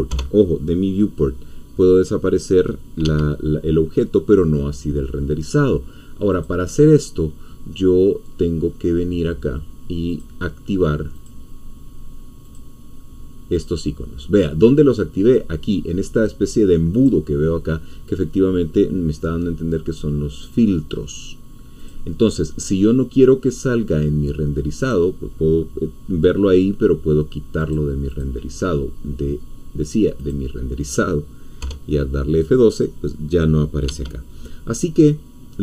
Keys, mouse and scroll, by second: 0.1 F12, 3.0 Escape, 6.3-8.6 drag, 10.1 click, 11.2 click, 12.4 click, 13.5 click, 16.9 click, 21.8 click, 24.8 click, 27.6 click, 28.1 click, 30.2 click, 31.6 F12, 33.8 Escape.